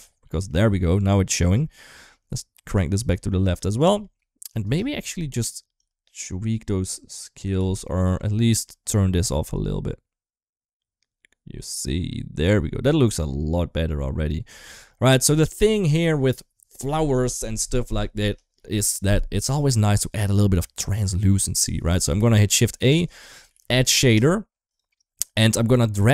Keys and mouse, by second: 0.0 middle click, 1.7-2.5 drag, 3.6 shift+middle click, 5.5-7.1 drag, 7.3 ctrl+z, 7.8 middle click, 8.2 middle click, 9.2-14.4 drag, 15.1 middle click, 19.6 middle click, 20.5 middle click, 21.5 middle click, 22.1 middle click, 22.5 shift+a, 23.4 d, 25.7 click, 26.0-26.1 drag.